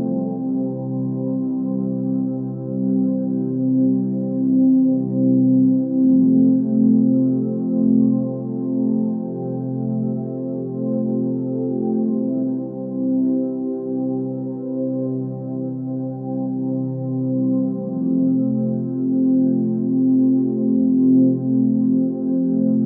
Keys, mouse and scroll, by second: 6.7 ctrl+space.